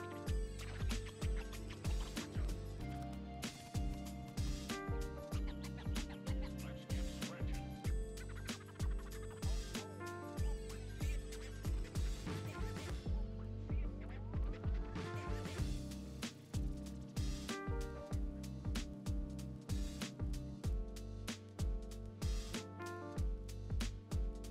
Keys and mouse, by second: 0.1 click, 0.9 click, 1.3 i, 2.2 click, 2.2 i, 2.6 i, 3.6 click, 4.3 i, 5.4 click, 6.1 middle click, 6.9 middle click, 7.0 click, 7.2 middle click, 7.2 0, 7.4 click, 8.4 click, 8.9 click, 9.5 click, 9.9 ctrl+click, 10.1 ctrl+middle click, 10.2 shift+click, 10.4 ctrl+click, 11.8 click, 12.6 g, 12.9 click, 13.4 g, 14.1 click, 14.3 g, 14.6 click, 14.9 g, 15.4 click, 15.6 click, 16.6 a, 16.8 BackSpace, 17.2 Delete, 17.2 BackSpace, 17.3 Delete, 17.7 click, 18.6 click, 19.1 ctrl+s, 19.6 click, 20.0 click, 21.0 ctrl+s, 21.0 click, 21.4 ctrl+alt+click, 22.2 drag, 22.5 g, 22.9 g.